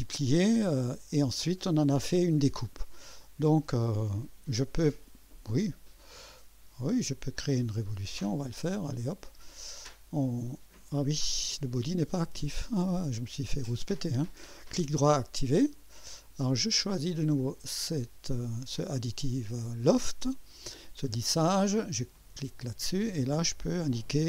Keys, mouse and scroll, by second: 0.6 scroll down 1, 3.8 click, 6.2 click, 9.5 click, 11.0 click, 12.4 click, 14.4 right click, 15.0 click, 17.5 click, 22.1 click.